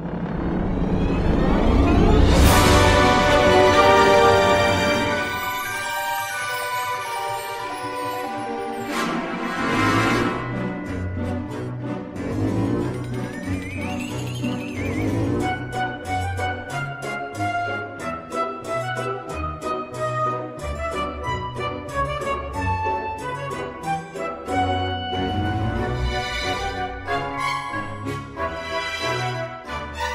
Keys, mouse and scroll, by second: 0.0 g, 0.3 click, 0.5 scroll, 0.9 click, 1.1 click, 1.7 right click, 2.3 click, 3.0 click, 3.2 ctrl+r, 3.3-4.1 scroll, 3.8 click, 4.2 middle click, 4.4 click, 4.6 click, 4.9 7, 5.3 middle click, 5.4 middle click, 5.6 middle click, 5.7-6.0 scroll, 6.8 middle click, 6.9 7, 7.3 click, 7.7 g, 7.8 click, 8.0 click, 8.1 g, 8.8 click, 9.0 click, 9.2-11.5 typing, 9.3 click, 9.5 click, 9.8 click, 10.1 click, 10.5 click, 10.8 click, 11.1 click, 11.2 middle click, 11.4 click, 11.8 click, 12.5 click, 12.7 click, 12.8 click, 13.1 ctrl+r, 13.2-13.6 scroll, 13.8 click, 13.9 click, 14.2 click, 14.5 click, 14.6 g, 15.0 click, 15.3 click, 15.3 g, 15.5 click, 15.6 g, 16.1 click, 16.3 click, 16.4 scroll, 16.7 middle click, 16.8 shift+middle click, 17.2 click, 17.4-27.8 typing, 17.8 click, 17.9 click, 18.2 click, 18.3 scroll, 18.5 click, 18.8 click, 18.9 click, 19.2 click, 19.3 click, 19.4 click, 19.6 click, 19.6 click, 19.8 click, 20.0 click, 20.3 click, 20.5 click, 20.6 click, 20.9 click, 21.0 click, 21.3 click, 21.6 click, 21.7 click, 21.9 click, 22.0 click, 22.3 click, 22.4 click, 22.6 click, 22.9 click, 23.0 click, 23.5 click, 23.8 click, 24.3 click, 25.1 click, 25.2 click, 25.5 click, 25.7 click, 26.0 click, 26.2 click, 26.8 click, 27.5 click, 28.0 click, 28.4 click, 28.5 click, 28.7 click, 28.8 ctrl+r, 28.9 middle click, 29.0 click, 29.2 click, 29.4 click, 29.7 click, 29.8 click.